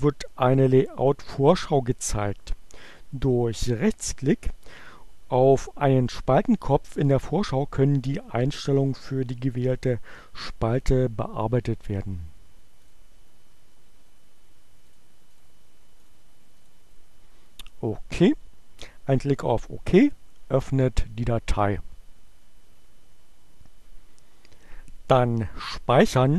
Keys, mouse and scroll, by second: 13.0 click, 14.9 click, 15.2 click, 15.9 click, 16.7 click, 18.9-20.4 drag.